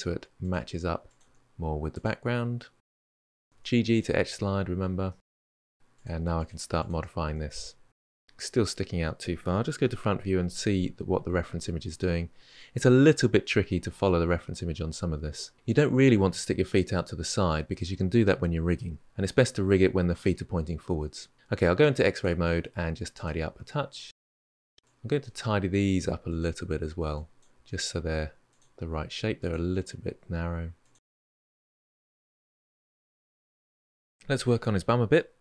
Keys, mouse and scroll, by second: 0.9 click, 1.0 g, 2.7 click, 2.9 g, 3.4 click, 3.5 g, 4.3-5.7 middle drag, 5.7 click, 5.9 shift+click, 6.0 shift+click, 6.2 g, 6.8 click, 6.9 g, 7.3 middle click, 7.9 scroll up 1, 7.9-9.6 middle drag, 9.6 KP_1, 21.9 click, 22.8 g, 23.6 click, 23.6 g, 24.0 click, 24.0 g, 24.3-24.7 shift+middle drag, 24.7 drag, 25.2 g, 26.9 click, 27.3 g, 29.2 click, 29.4 g, 31.3 click, 31.4 g, 32.1 click, 32.5 click, 32.6-33.7 middle drag, 34.3 click, 34.4-34.8 middle drag, 34.8 g, 35.1 middle click.